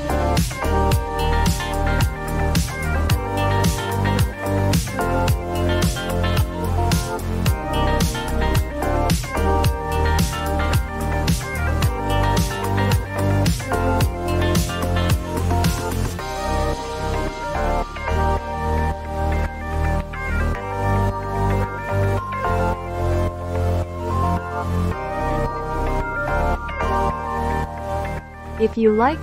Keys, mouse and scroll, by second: 0.3 Return, 2.5 click, 3.9 click, 4.3 0, 4.6 Return, 5.8 click, 6.5-6.9 typing, 7.3 Return, 9.5 click, 10.0 click, 10.6 click, 12.5 click, 13.3 click, 26.3-28.4 drag.